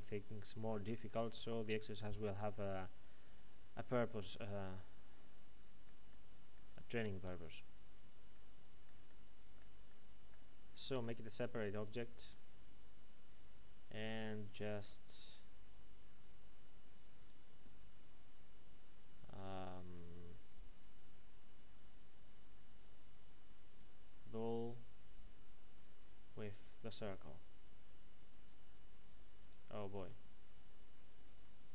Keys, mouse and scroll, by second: 10.9 p, 11.5 click, 12.2 Tab, 14.4 click, 17.2 right click, 18.6 click, 23.7 click, 29.4 right click.